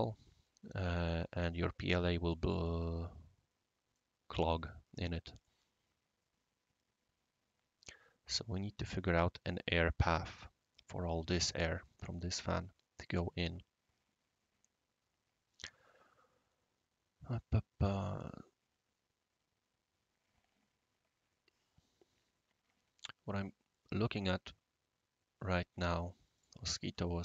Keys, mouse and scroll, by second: 1.5-3.9 middle drag, 1.5-3.9 right drag, 4.6-5.0 scroll down 2, 5.4-7.2 middle drag, 5.4-9.2 right drag, 11.5-23.0 right drag, 26.3 click.